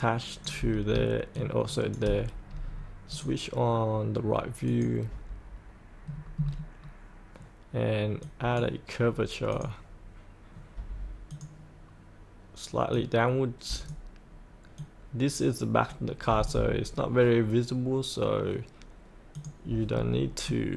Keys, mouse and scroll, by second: 1.3 shift+click, 3.1 click, 6.0-8.2 scroll down 1, 8.2-17.0 drag, 19.9-20.2 scroll up 1, 20.5 middle click.